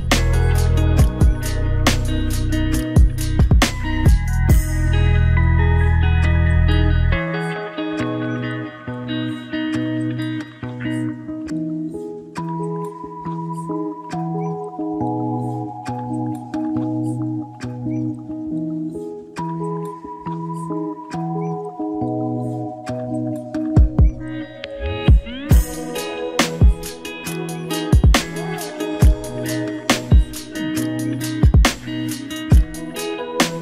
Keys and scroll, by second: 3.8 ctrl+d, 17.6 ctrl+z, 24.2 ctrl+d, 32.9 ctrl+=.